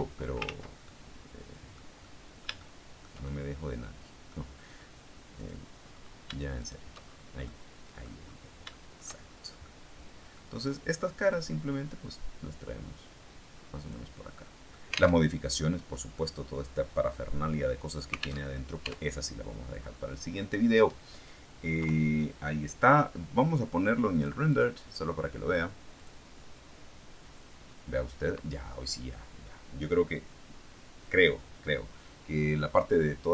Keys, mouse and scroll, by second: 0.4 ctrl+z, 0.7-1.8 ctrl+drag, 1.9-3.1 drag, 3.1 shift+click, 3.2-4.3 shift+middle drag, 5.3 click, 6.5 shift+right click, 6.9-7.3 shift+scroll down 3, 7.3 middle click, 8.1-8.6 scroll down 3, 8.6 shift+middle click, 8.9 shift+right click, 9.1-10.8 shift+middle drag, 11.4-14.0 drag, 14.3 middle click, 15.1 alt+Tab, 18.3 alt+Tab, 19.1-19.7 scroll down 2, 19.7-20.4 scroll up 2, 20.4-21.0 scroll down 2, 21.7 KP_3, 24.0 click, 24.4 click, 25.9 click.